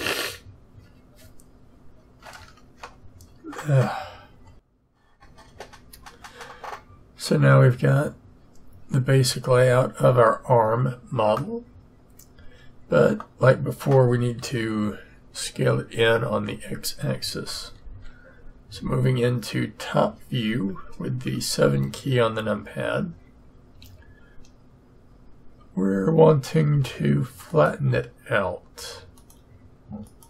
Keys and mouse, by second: 11.3-17.7 middle drag, 17.7 z, 18.7 KP_7, 23.8 a.